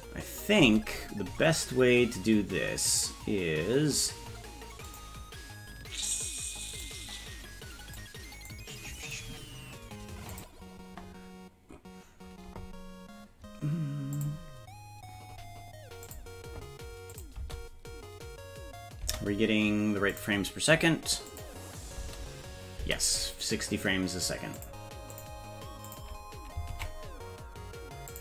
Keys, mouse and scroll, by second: 0.7 space, 4.9 click, 6.9-8.0 drag, 8.6 click, 10.3 click, 14.2 click, 16.0 click, 17.1 click, 17.3 space, 19.0 space, 20.1 click, 21.3 click, 22.0 space, 22.8 space, 24.6 click, 25.1 click, 25.9 click, 26.7 ctrl+Tab, 28.1 click.